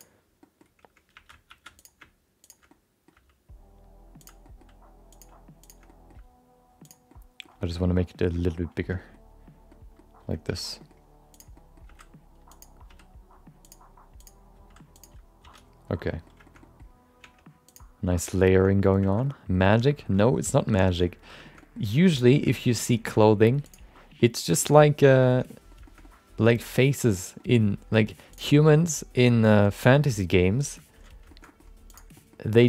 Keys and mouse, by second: 0.5 middle click, 1.1 1, 1.6 shift+2, 1.8 click, 2.4 shift+click, 2.7 middle click, 3.1 g, 4.4 middle click, 5.1 click, 5.6 shift+click, 5.8 middle click, 6.1 g, 7.1 middle click, 7.6 shift+middle click, 7.8 middle click, 8.2 shift+middle click, 8.3 middle click, 8.8 shift+middle click, 8.9 middle click, 9.7 middle click, 10.4 alt+z, 10.8 middle click, 11.3 click, 11.5 middle click, 11.8 g, 12.9 r, 14.2 click, 14.5 g, 15.4 alt+z, 15.9 middle click, 16.4 shift+middle click, 16.6 middle click, 17.5 Tab, 18.1 Tab, 18.5 shift+middle click, 18.7 middle click, 19.0 shift+middle click, 19.2 middle click, 19.6 shift+middle click, 19.8 middle click, 20.2 shift+middle click, 20.5 middle click, 20.8 shift+middle click, 21.0 middle click, 21.4 middle click, 21.6 middle click, 22.1 click, 22.3 middle click, 22.5 middle click, 23.1 r, 23.9 middle click, 24.6 middle click, 24.7 middle click, 25.5 middle click, 25.8 shift+middle click, 26.0 middle click, 26.8 middle click, 27.4 middle click, 27.9 middle click, 28.3 click, 28.5 shift+middle click, 28.7 middle click, 29.2 g, 30.1 middle click, 30.9 alt+z, 31.2 shift+middle click, 31.4 middle click, 31.9 click, 32.1 middle click, 32.5 g.